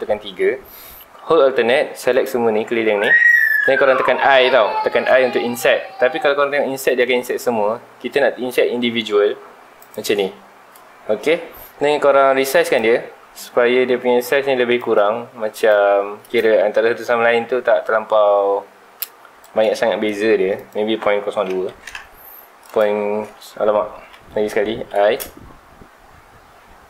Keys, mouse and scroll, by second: 2.1 alt+click, 3.2 shift+middle click, 3.8-4.6 scroll up 1, 7.0 shift+click, 9.8 click, 12.7-19.4 shift+drag, 20.5-21.9 drag, 21.9 KP_Enter, 22.6 click, 23.5 ctrl+z.